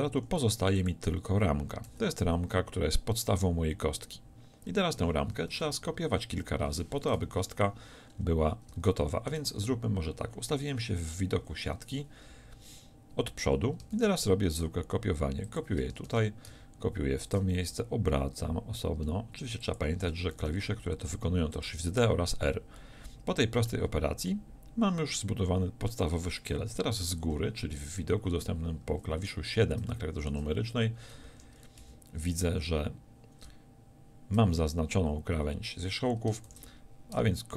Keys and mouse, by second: 0.2 x, 1.9 z, 6.4 a, 6.4 KP_1, 7.3 shift+c, 14.0 shift+d, 16.1 shift+d, 17.8 r, 20.4 shift+d, 27.3 KP_7, 28.9 a, 31.3 ctrl+z, 31.9 z, 36.5 shift+d.